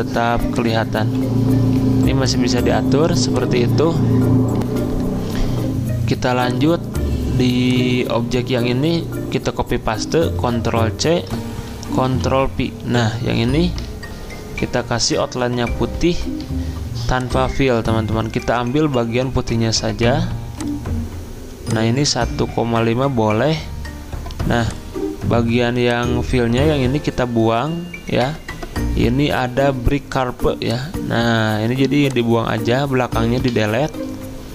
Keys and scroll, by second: 1.0 g, 10.5 ctrl+c, 12.0 ctrl+v, 33.4 Delete.